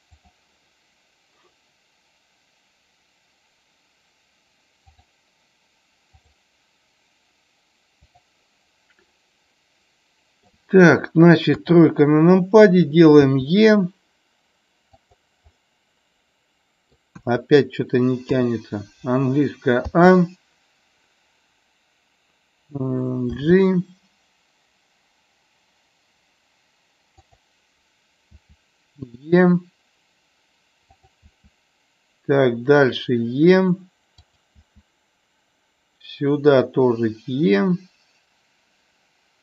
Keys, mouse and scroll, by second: 4.9 click, 6.2 click, 9.1-10.4 middle drag, 11.4 KP_3, 13.1 e, 15.4-16.9 middle drag, 17.2 KP_1, 18.3 KP_3, 19.8 a, 27.2 click, 30.8 click, 34.2 click.